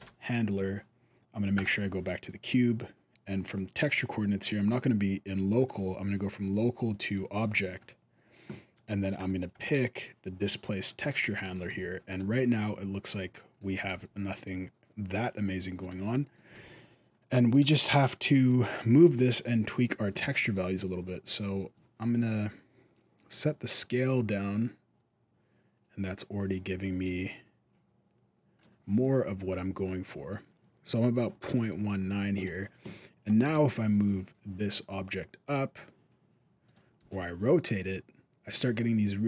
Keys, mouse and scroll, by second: 1.4 right click, 5.4 click, 9.0 click, 9.3 click, 10.9 middle click, 11.5 alt+a, 11.9 right click, 12.2 middle click, 13.7 g, 15.9 middle click, 16.3 alt+a, 17.3 right click, 18.1 middle click, 19.0 right click, 20.4 click, 21.8 shift+click, 28.8 middle click, 31.2 middle click, 32.2 right click, 32.6 middle click, 33.2 g, 36.8 r.